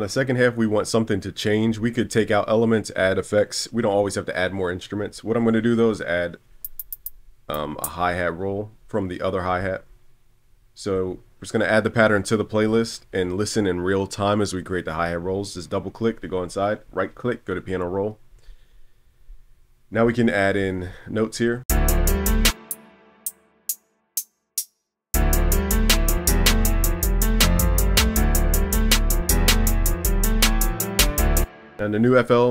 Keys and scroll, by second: 2.1 super+s, 12.6 super+b.